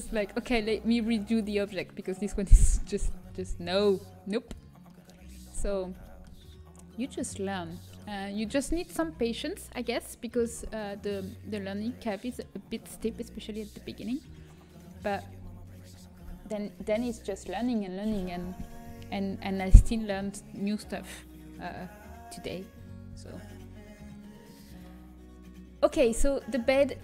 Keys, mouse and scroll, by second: 1.4-2.9 middle drag, 3.6 Tab, 4.9 click, 5.4-6.6 middle drag, 7.8-14.2 middle drag, 14.8-21.8 middle drag, 23.6-26.5 middle drag, 26.5 Tab.